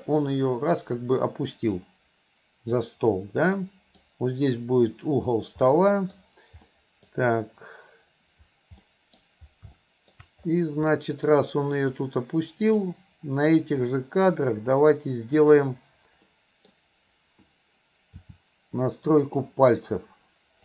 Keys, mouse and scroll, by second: 0.1-3.0 drag, 3.1-4.0 middle drag, 5.7-6.2 middle drag, 6.7 middle click, 8.9-9.2 middle drag, 9.8-10.2 middle drag, 11.0 middle click, 12.1 click, 15.4 click, 16.4 middle click, 18.3 r.